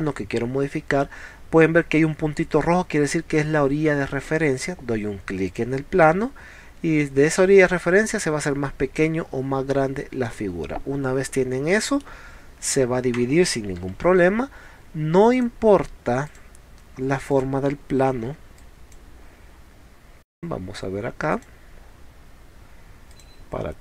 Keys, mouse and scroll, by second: 5.5 click, 10.2 click, 11.7 middle click, 14.0 ctrl+z, 15.4 click, 16.3 click, 17.3 click, 18.3 e, 18.6 click, 20.3 click, 21.3 click, 23.1 click.